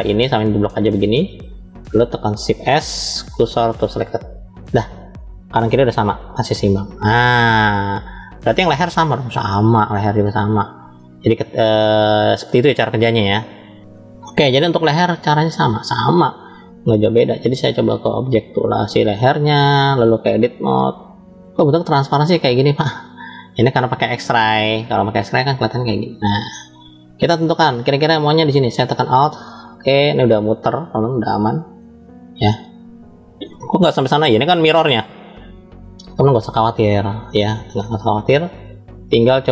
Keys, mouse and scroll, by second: 0.7 click, 2.5 shift+s, 5.5-6.1 scroll down 2, 6.2-7.2 scroll down 2, 7.2-8.5 middle drag, 8.8-9.1 scroll up 2, 10.0 scroll up 1, 10.2 shift+middle click, 13.8 middle click, 14.5-15.7 middle drag, 16.9-17.7 drag, 18.2 click, 19.6-20.6 drag, 22.1-23.5 middle drag, 24.1 click, 24.9-27.4 middle drag, 29.0 alt+click, 29.9-31.6 middle drag, 31.9-32.3 scroll down 3, 32.6 shift+middle click, 35.0-36.5 middle drag, 36.9-39.4 middle drag.